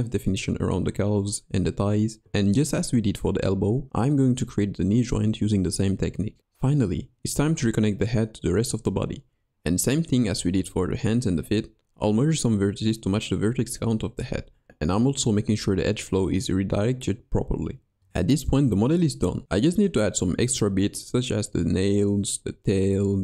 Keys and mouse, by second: 1.5 i, 1.7 middle click, 2.7 g, 4.2 click, 4.5 ctrl+Tab, 6.0 click, 6.7 middle click, 6.8 click, 7.7 click, 8.1 click, 8.7-9.5 drag, 9.5-10.1 middle drag, 10.2 shift+j, 10.9 j, 12.0 shift+2, 12.2 shift+click, 13.3 ctrl+shift+x, 13.5 shift+drag, 13.7 shift+middle click, 14.7 click, 15.6 middle click, 15.7 click, 16.5 click, 18.6-19.6 middle drag, 22.2 middle click, 22.5-23.2 drag.